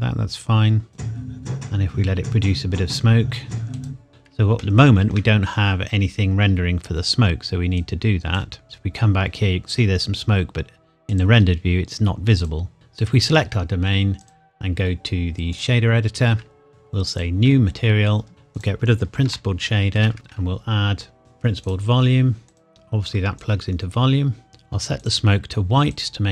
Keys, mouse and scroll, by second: 0.9 click, 3.7 click, 4.9 shift+middle click, 7.8 click, 11.1 click, 18.2-18.5 scroll up 1, 18.5 click, 19.2 Delete, 20.1 shift+a, 21.6 click, 24.5-25.0 scroll up 1, 25.0 click.